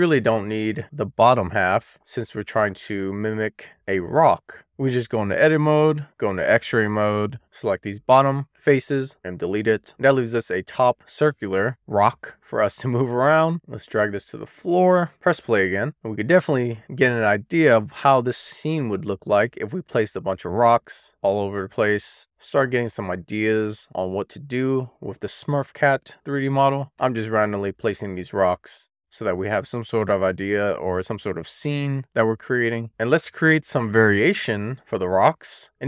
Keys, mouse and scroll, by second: 0.2 shift+middle click, 1.0-1.7 scroll up 1, 1.7-2.0 scroll down 1, 2.0 middle click, 2.6 click, 4.6 alt+middle click, 5.3-6.0 scroll up 1, 6.0 click, 6.8 alt+z, 7.5 click, 8.7 x, 11.0 click, 13.6 middle click, 14.1 click, 14.2 middle click, 14.4 click, 14.9 middle click, 15.3 click, 16.0 shift+middle click, 16.7 middle click, 17.7-18.1 scroll down 1, 18.1 middle click, 19.4 shift+middle click, 20.7-21.3 middle drag, 22.2 w, 23.3 drag, 24.2 click, 24.6 middle click, 25.4 shift+middle click, 27.1 shift+d, 27.7 click, 27.8 middle click, 28.1 click, 29.4 middle click, 30.1 middle click, 30.9 middle click, 31.1 shift+middle click, 31.4 middle click, 31.9 shift+middle click, 32.2-32.8 scroll up 1.